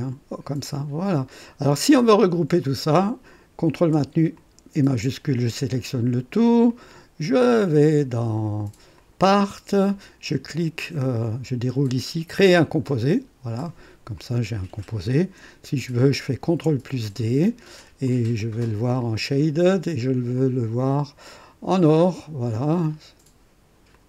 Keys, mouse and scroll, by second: 1.1 click, 2.6 click, 4.4 shift+click, 9.1 click, 11.2 click, 12.8 click, 14.1 click, 16.5 ctrl+d, 18.0 click, 19.0 click, 20.4 click, 22.0 click, 23.9 click.